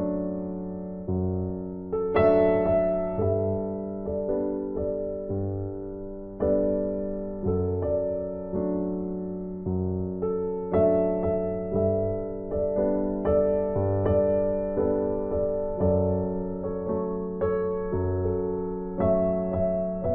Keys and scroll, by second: 6.9 ctrl+t, 18.2 ctrl+l.